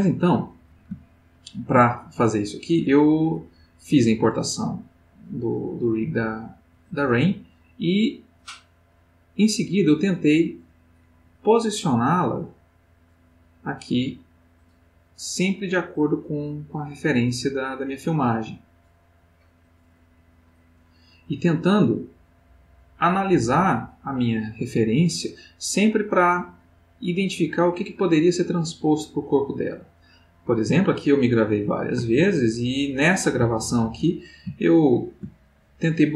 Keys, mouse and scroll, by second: 1.0 ctrl+middle click, 3.0-23.2 drag, 32.1-33.7 ctrl+middle drag, 35.2 ctrl+middle click.